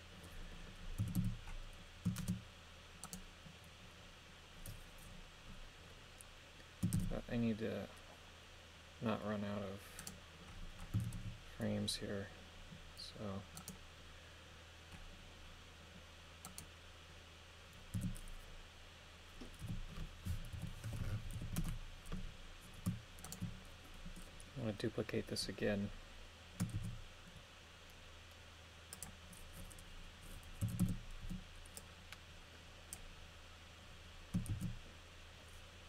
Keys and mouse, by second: 1.0 a, 1.2 a, 2.2 shift+space, 3.0 right click, 6.9 shift+d, 10.0 right click, 10.9 a, 11.1 a, 13.6 right click, 16.4 right click, 17.9 a, 19.6 g, 20.5 KP_Subtract, 20.8 KP_1, 21.3 KP_5, 21.6 Return, 23.2 shift+right click, 26.7 shift+d, 28.9 click, 30.6 a, 30.8 a, 31.2 b, 34.5 shift+d.